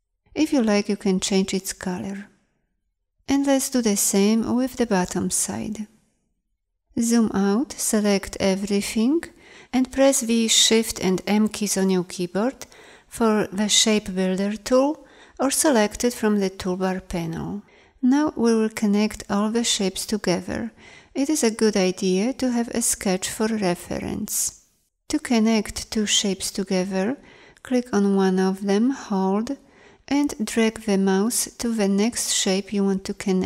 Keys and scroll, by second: 3.5 s, 7.0 z.